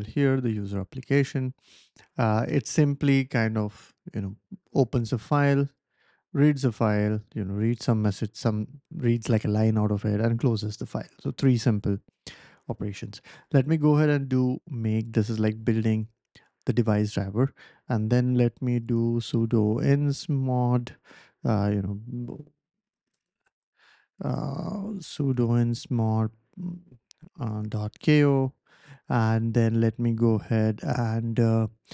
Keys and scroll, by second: 13.0-14.1 typing, 16.0 ctrl+l, 18.0-25.2 typing, 23.1 Tab, 27.4-28.2 typing, 31.7-31.9 typing.